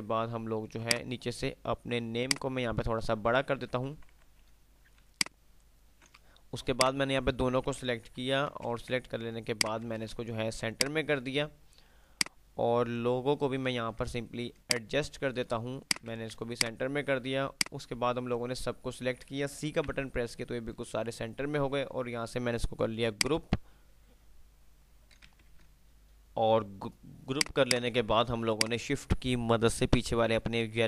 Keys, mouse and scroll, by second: 1.0 click, 2.4-3.2 shift+drag, 4.0 ctrl+r, 5.0-6.7 drag, 6.7-7.4 click, 7.9 ctrl+g, 7.9 Delete, 8.9 ctrl+z, 9.2 shift+click, 10.9 click, 12.5-13.2 ctrl+click, 16.0 c, 16.7-18.4 drag, 19.9 c, 23.2 click, 25.7 ctrl+F10, 26.0 click, 28.5 shift+click.